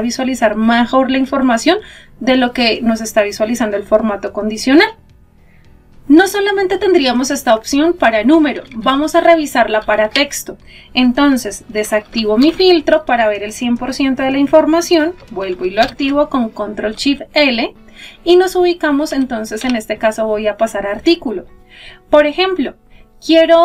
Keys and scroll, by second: 14.1 ctrl+shift+l.